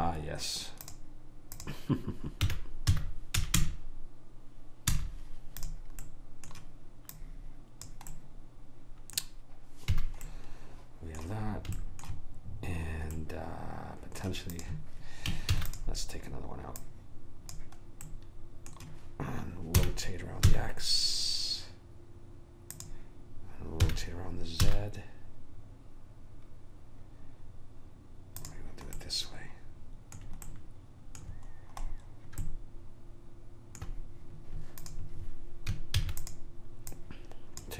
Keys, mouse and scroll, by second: 1.0 click, 2.6 r, 6.2-7.3 middle drag, 7.3 click, 7.3 right click, 8.3 right click, 10.1 a, 14.7 click, 15.7 shift+d, 18.2 right click, 19.9 r, 24.0 r, 29.1 middle click, 35.0 click, 36.1 shift+d, 37.1 click.